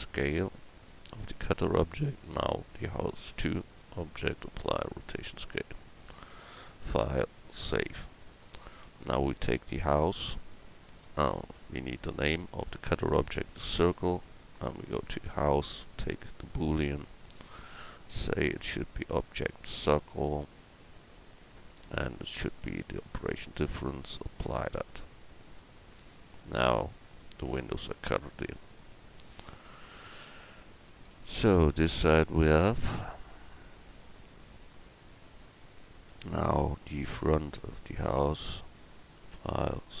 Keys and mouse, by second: 6.7-12.5 drag, 12.5 right click, 14.7-16.0 right drag, 16.0 middle click, 16.7-22.0 drag, 22.2-25.9 drag, 33.0 click, 37.0 g, 39.1-40.0 drag.